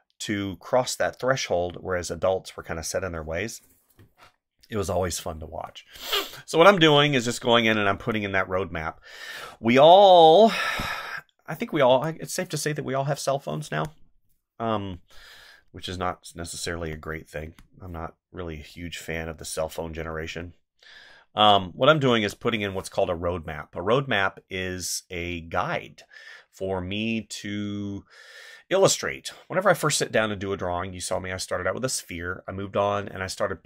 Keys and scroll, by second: 3.9 space, 5.4 space, 8.0 space, 11.9 space, 13.5 space, 14.7 space, 16.8 space, 22.1 space.